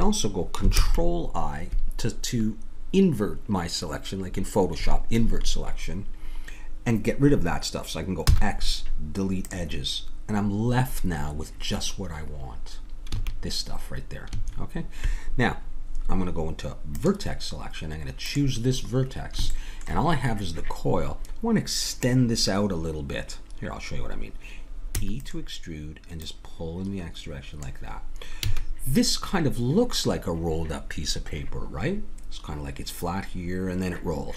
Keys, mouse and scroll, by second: 0.7 ctrl+i, 8.3 x, 13.1 a, 14.3 a, 16.9-20.9 drag, 20.9-23.2 middle drag, 25.0 e, 26.2-28.0 drag, 28.4 a.